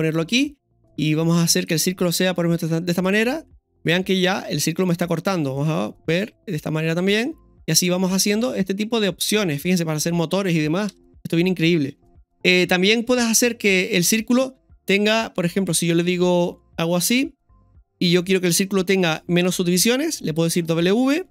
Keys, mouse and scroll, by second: 13.8 KP_1.